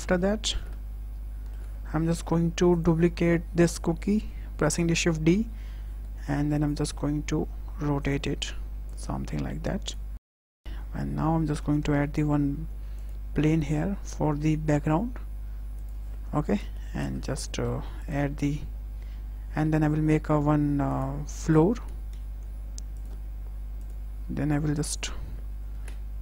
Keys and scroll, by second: 5.2 y, 10.0 w, 11.8 shift+a, 14.2 s, 16.3 KP_0, 17.4 Tab, 19.8 2, 21.6 e, 21.9 z.